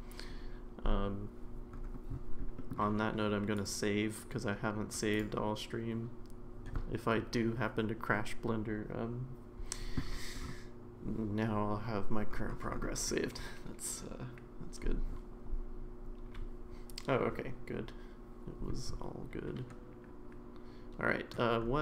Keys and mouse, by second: 2.6 middle click, 3.6-5.3 drag.